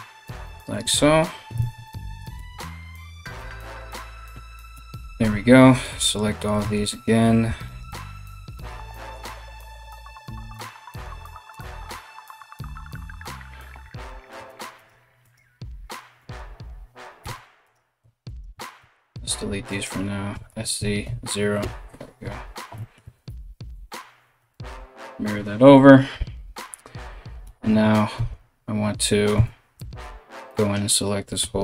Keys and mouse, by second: 0.4 f, 1.2 ctrl+z, 2.0 g, 3.1-31.6 middle drag, 3.3 right click, 4.3 KP_3, 5.4 right click, 6.5 right click, 7.2 alt+shift+right click, 7.7 alt+shift+right click, 11.1 shift+right click, 11.5 shift+right click, 13.5 3, 14.1 right click, 14.4 right click, 14.8 right click, 16.8 1, 17.2 right click, 17.9 shift+right click, 18.4 x, 19.3 alt+right click, 22.7 alt+x, 23.8 KP_1, 27.0 a, 27.7 a, 27.9 a, 28.9 z, 29.3 b, 31.0 g.